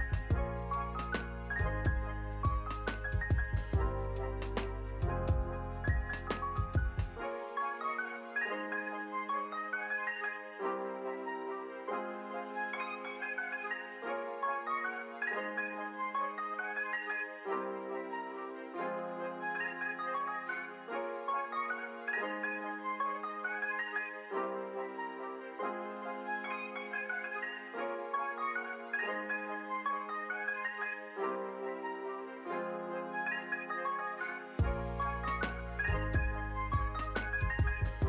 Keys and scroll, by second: 14.0 ctrl+s, 14.6 space, 18.0 space, 27.7 ctrl+s, 28.9 ctrl+space, 29.5-30.6 typing, 32.2 space, 35.5 space.